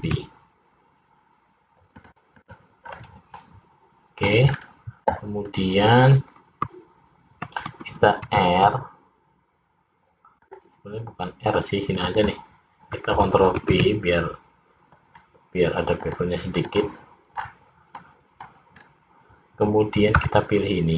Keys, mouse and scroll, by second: 2.4 click, 2.9-3.4 scroll down 3, 3.4 middle click, 4.6 scroll up 3, 8.2 ctrl+r, 12.0 click, 12.4 click, 13.6 ctrl+b, 16.7 click, 17.5-18.0 scroll down 3, 18.0 middle click, 18.8-19.5 scroll up 2, 20.2 c.